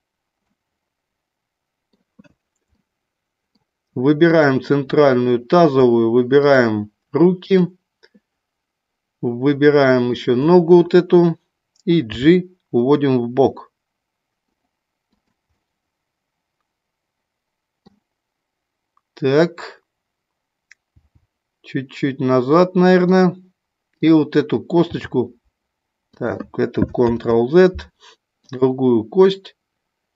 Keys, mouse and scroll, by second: 0.4-1.8 middle drag, 0.4 scroll up 1, 2.7 middle click, 2.7 scroll up 1, 4.3 click, 6.4 shift+click, 7.4 shift+click, 10.2 shift+click, 12.0 g, 15.0 click, 15.6-17.9 middle drag, 20.9 g, 23.0 click, 24.8 g, 27.2 ctrl+z.